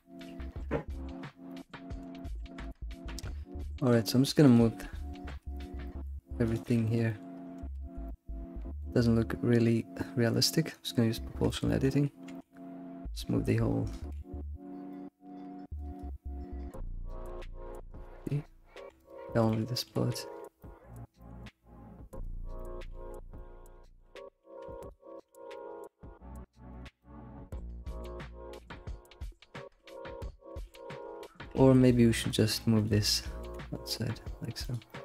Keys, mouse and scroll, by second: 0.0-0.3 shift+middle drag, 0.3 scroll up 3, 1.5-3.2 middle drag, 3.2 Tab, 3.9 click, 4.5 ctrl+click, 5.3 Tab, 5.6 shift+click, 5.8-6.6 middle drag, 6.6 shift+click, 7.1 alt+middle click, 7.6 Tab, 7.7 alt+x, 8.0-10.7 middle drag, 10.7 click, 11.5 alt+middle click, 11.7 alt+middle click, 12.3 g, 14.1 alt+x, 14.5 alt+x, 14.6 scroll down 4, 14.9-16.0 middle drag, 15.3 g, 16.0 ctrl+Left, 16.8 ctrl+Left, 17.0 middle click, 17.7 g, 18.3 ctrl+click, 18.7 g, 19.5 alt+middle click, 20.0-20.6 scroll up 7, 20.6 shift+middle click, 21.2 g, 22.3 scroll down 1, 22.5 middle click, 22.9 alt+x, 23.2 scroll down 1, 23.3-24.9 middle drag, 24.9 shift+click, 25.1 middle click, 25.6 g, 27.0-28.6 middle drag, 28.6 ctrl+z, 29.8 middle click, 30.6 ctrl+z, 31.2-32.4 shift+middle drag, 32.4 click, 32.8 ctrl+click, 33.5 g, 34.9-35.0 middle drag.